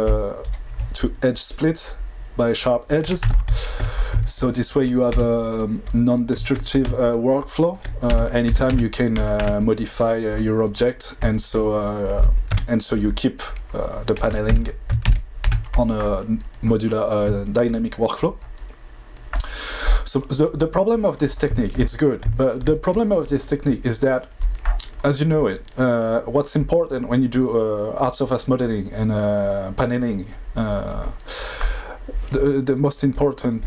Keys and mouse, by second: 0.4 click, 3.2 Tab, 5.1 2, 6.7 click, 8.1 1, 8.2 click, 8.4 g, 8.6 z, 9.4 Tab, 12.5 KP_5, 14.5 ctrl+z, 15.0 ctrl+z, 15.4 Tab, 33.1 click.